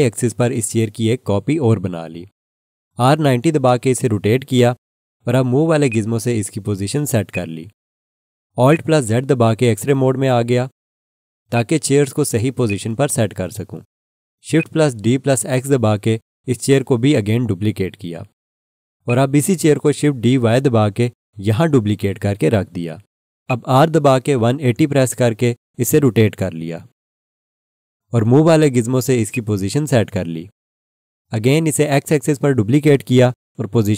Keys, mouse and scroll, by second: 3.3 r, 4.1 9, 5.9 click, 9.6 alt+z, 10.2 scroll up 1, 11.5 click, 16.1 shift+d, 16.4 x, 19.0 click, 21.2 shift+d, 21.9 y, 23.4 click, 24.6-26.1 typing, 26.9 Return, 29.3 click, 33.5-33.9 typing.